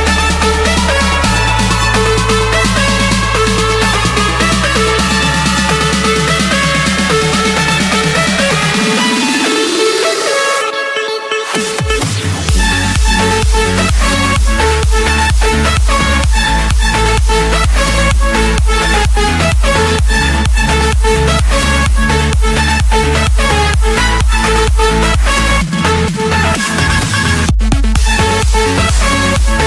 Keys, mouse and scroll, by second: 2.2 BackSpace, 3.0 f, 3.6 Return, 5.5-6.5 drag, 7.1 Return, 9.6 click, 12.3 click, 13.6 click, 14.6 click, 16.1 middle click, 18.8 click, 19.6 click, 19.9-20.2 scroll, 20.9 click, 21.5-21.8 scroll, 21.8 Escape, 22.8 typing, 23.2 Return, 26.1-27.1 drag, 28.7-29.1 typing, 29.5 Return.